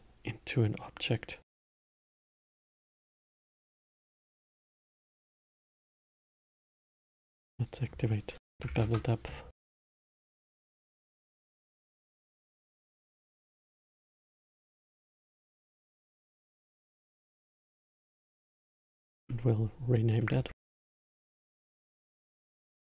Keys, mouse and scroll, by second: 0.0 shift+a, 3.0 click, 5.1-10.5 drag, 10.5-11.6 scroll up 5, 11.6-13.6 middle drag, 13.6 scroll down 3, 14.3-15.8 alt+middle drag, 15.8 scroll up 2, 18.4 click, 18.6-21.6 drag.